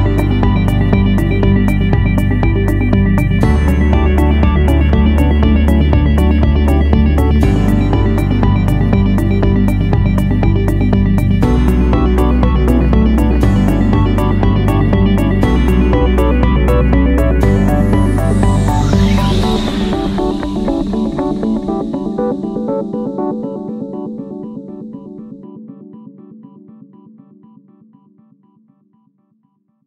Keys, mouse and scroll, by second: 3.3 click, 5.5 ctrl+a.